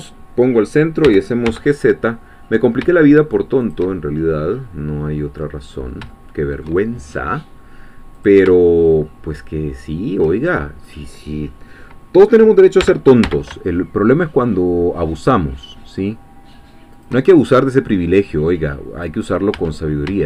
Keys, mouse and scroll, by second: 1.0 g, 1.5 z, 3.6 shift+click, 3.9-5.6 shift+middle drag, 5.7-6.1 scroll up 1, 6.1 shift+middle click, 8.2 click, 8.6-10.4 shift+middle drag, 10.4-10.9 shift+scroll up 3, 12.8 g, 13.2 z, 17.0 shift+click, 17.8-18.2 scroll down 2, 18.3 middle click, 19.2 scroll down 1, 19.3 scroll up 2, 19.5 Tab, 19.6-20.1 scroll down 1.